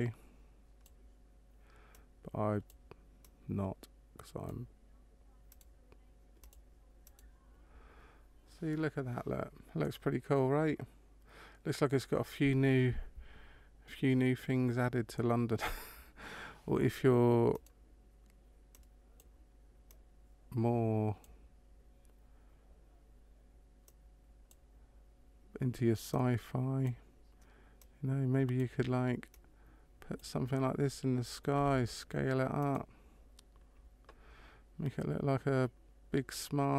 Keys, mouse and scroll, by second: 1.9 click, 3.2 click, 5.5 right click, 6.4 click, 7.1 right click, 17.5 right click, 18.7 click, 19.8 click, 23.9 click, 26.1 click, 27.8 click, 29.4 click, 31.6 s.